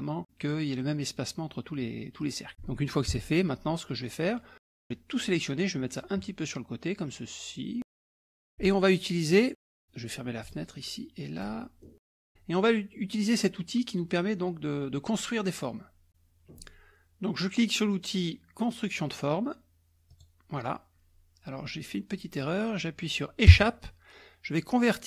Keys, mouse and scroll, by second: 2.2 click, 3.2 KP_Subtract, 3.8-4.6 scroll up 2, 4.6-5.8 drag, 6.0-8.1 drag, 8.1 middle click, 9.3 click, 10.4 click, 11.4 click, 11.8 middle click, 20.1 click, 23.6 Escape.